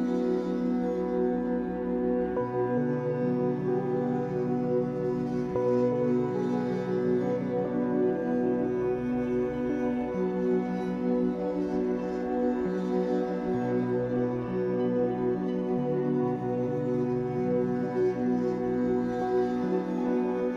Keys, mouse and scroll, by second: 0.1 alt+middle click, 0.5 z, 0.9 click, 1.2 b, 1.7 s, 4.0 s, 5.4-7.0 middle drag, 7.0 alt+n, 8.2 Tab, 8.5 z, 8.7 scroll down 4, 8.9-9.3 middle drag, 9.3 click, 9.7 ctrl+s, 10.5-11.1 shift+middle drag, 11.1 scroll down 3, 11.4-12.2 shift+middle drag, 12.2-13.3 scroll up 6, 12.8 click, 13.0 middle click, 13.6 2, 13.7 click, 14.0 alt+shift+click, 14.1 alt+shift+click, 14.7 ctrl+b, 16.2 click, 16.4 alt+shift+click, 16.5 alt+shift+click, 16.8 ctrl+b, 18.6 click, 18.8 alt+shift+click, 19.1 alt+shift+click, 19.4 ctrl+b, 20.2 Tab, 20.3-20.5 scroll down 9.